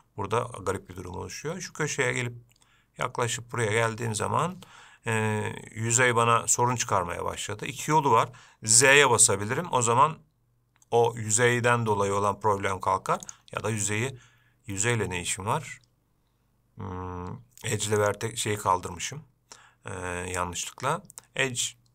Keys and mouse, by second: 13.5-21.9 drag.